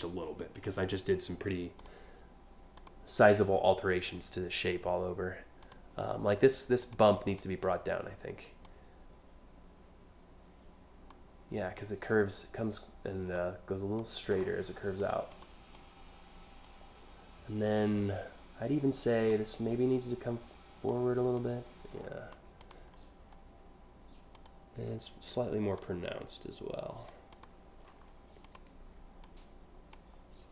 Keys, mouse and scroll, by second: 2.4 click, 5.2 click, 6.4 click, 6.9 click, 7.3 click, 8.2-10.8 drag, 13.0 click, 13.9 click, 14.6 click, 15.0 click, 15.4 click, 18.9-20.5 drag, 21.0-22.0 drag, 22.3 click, 24.0 click, 25.4-26.7 drag, 26.9 click, 27.5 scroll down 1, 28.1 click, 28.8 click, 30.1 scroll down 1.